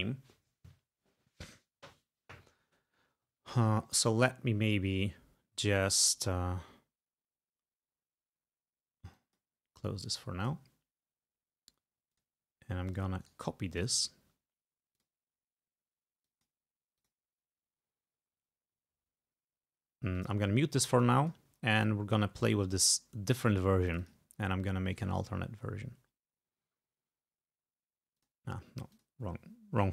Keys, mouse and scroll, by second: 9.2 click, 10.1 click, 10.5 click, 11.6 scroll down 2, 12.2 click, 12.9 click, 13.3 right click, 13.8 click, 14.0 right click, 15.0 click, 16.3 click, 17.0 click, 20.2 click, 21.1 click, 23.4 click, 23.9 click, 25.0 right click, 28.3 click, 29.1 click.